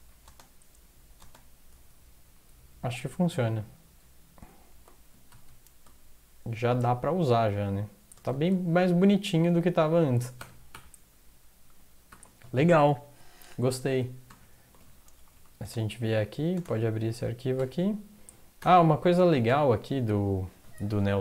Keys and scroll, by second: 0.1 Down, 0.8 Down, 0.8 space, 1.7 Down, 1.9 Down, 1.9 space, 5.3 typing, 8.3 a, 9.3 Up, 9.6-9.9 Up, 10.4 ctrl+\, 10.7 ctrl+\, 12.1 ctrl+\, 14.3 ctrl+\, 15.2 Down, 15.3 Down, 15.5 Down, 15.6 Return, 16.1 Down, 16.5 Down, 17.6 Down, 17.6 space, 18.6 ctrl+\, 19.5 ctrl+\.